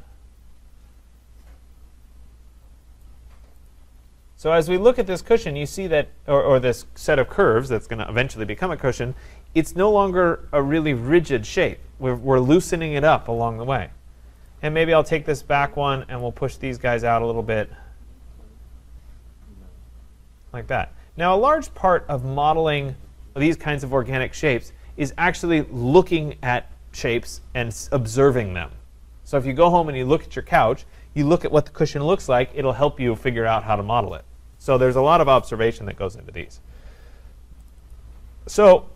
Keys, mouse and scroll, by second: 3.0 click, 3.7 click, 4.3-4.9 scroll, 4.9-5.3 scroll, 14.5 click, 16.2 click, 22.2 click, 22.8 click, 37.7 click, 37.9 click.